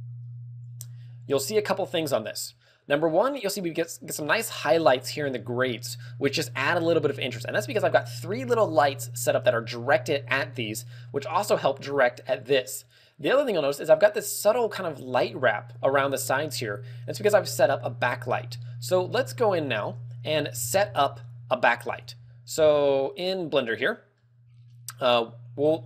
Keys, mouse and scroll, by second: 23.4 shift+middle click, 23.4-23.7 scroll up 3.